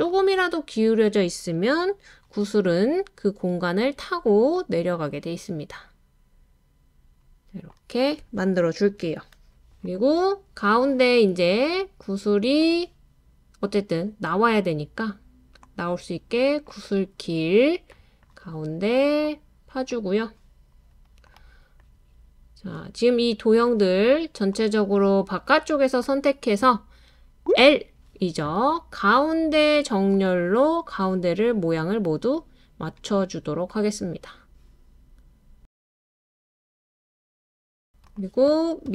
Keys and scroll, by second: 27.4 l, 27.6 l.